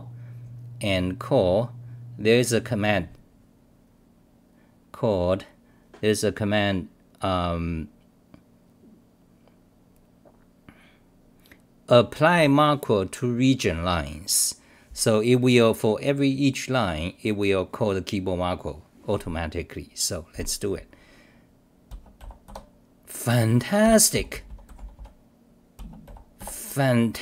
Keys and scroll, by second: 22.2-27.2 typing, 23.8 ctrl+g.